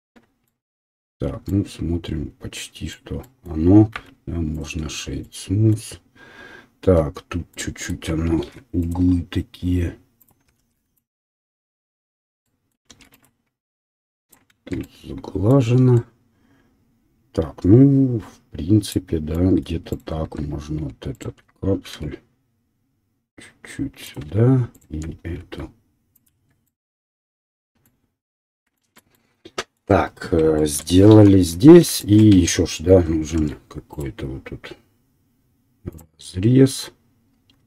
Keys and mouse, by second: 0.0 Tab, 3.9 w, 6.9 Tab, 6.9-7.9 drag, 8.1 ctrl+click, 8.4 ctrl+r, 10.6 ctrl+r, 12.2 middle click, 13.0 ctrl+r, 14.2-19.9 middle drag, 14.6 Tab, 19.9 click, 20.0-21.1 middle drag, 20.2 Tab, 21.1 alt+click, 21.2-24.0 middle drag, 21.9 s, 24.6 alt+middle click, 24.7 alt+click, 24.9-32.7 alt+middle drag, 25.5 s, 26.4 Tab, 31.4 KP_1, 32.3 Tab, 32.9-36.4 ctrl+middle drag, 33.4 ctrl+r.